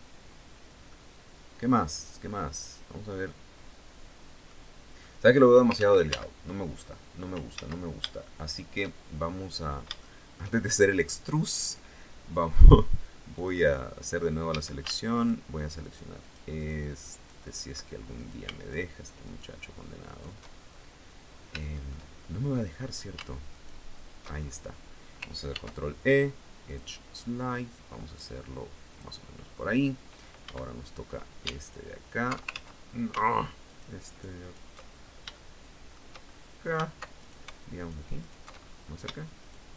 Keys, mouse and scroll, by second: 0.4-3.9 drag, 4.6 click, 5.3 ctrl+z, 6.3-6.8 ctrl+scroll up 3, 7.1 ctrl+z, 7.7 ctrl+shift+click, 8.6 shift+scroll down 2, 9.1 scroll up 2, 9.5 shift+middle click, 10.2 shift+scroll up 2, 12.9 click, 14.0 a, 14.7 alt+shift+right click, 15.4 alt+shift+right click, 15.8 alt+shift+right click, 16.7 alt+shift+right click, 17.7 alt+shift+right click, 18.1 alt+shift+right click, 18.8 alt+shift+right click, 19.6 alt+shift+right click, 20.1 alt+shift+scroll down 1, 20.9 scroll up 1, 21.2 shift+middle click, 21.7-22.4 shift+scroll up 3, 23.1 alt+shift+right click, 23.9-24.3 alt+shift+scroll down 3, 25.0 ctrl+e, 26.2 click, 28.4 click, 30.0 a, 31.2 alt+shift+right click, 32.0 ctrl+alt+shift+z, 33.2 alt+shift+right click, 34.4-34.8 scroll up 2, 34.9 shift+middle click, 35.8-36.2 scroll up 2, 36.8 alt+shift+right click, 37.3 alt+shift+right click, 37.8 alt+shift+right click, 38.1 alt+shift+scroll up 1, 39.0 alt+shift+right click, 39.3 alt+shift+right click.